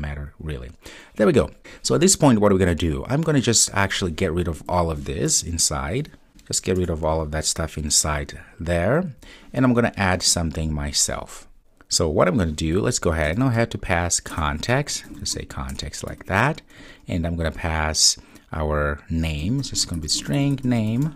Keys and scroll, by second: 14.3 Return, 19.2 Return.